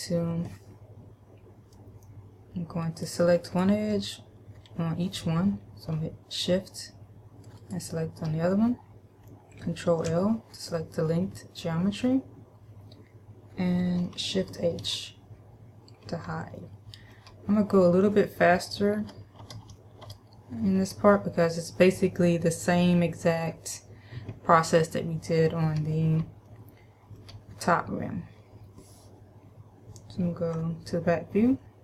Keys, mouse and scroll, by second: 3.0 right click, 3.6 right click, 7.8 shift+right click, 10.2 ctrl+l, 15.0 shift+h, 16.8 shift+middle click, 19.2 KP_Add, 19.6 KP_Add, 19.9 KP_Add, 26.7 shift+middle click.